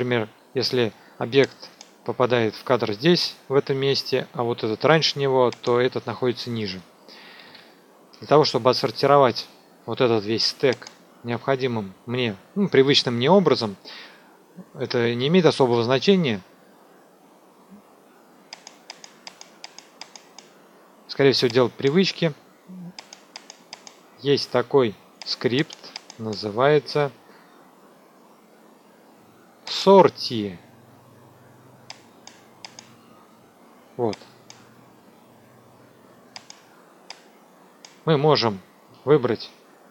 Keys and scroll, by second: 7.4 ctrl+a.